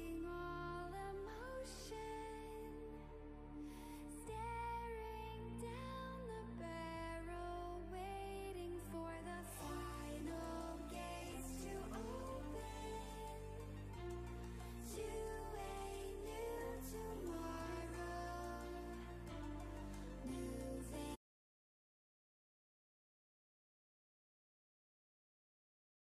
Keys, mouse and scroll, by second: 3.7 click, 9.2-20.1 drag, 20.1 right click, 20.3 click.